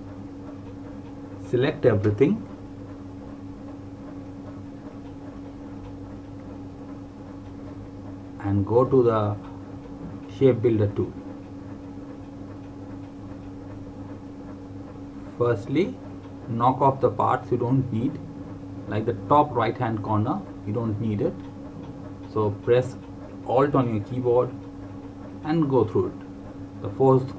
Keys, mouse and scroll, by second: 2.1 click, 4.8 click, 13.2 click.